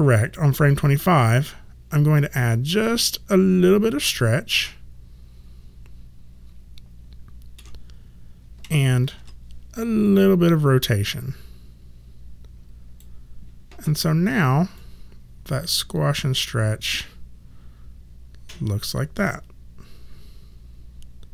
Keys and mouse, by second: 2.6 click, 4.1 ctrl+middle click, 9.1 e, 10.0 click, 14.7 click.